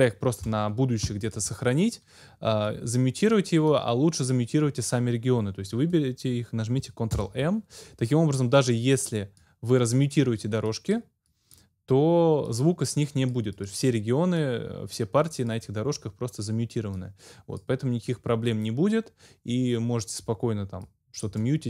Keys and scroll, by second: 7.2 ctrl+m.